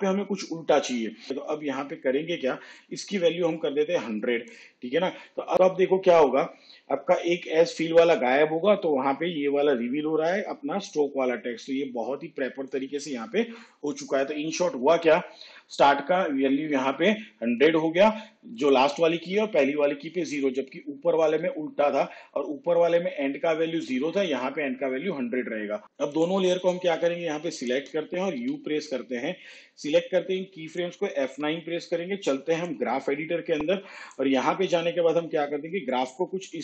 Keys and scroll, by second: 28.4 u, 31.3 F9.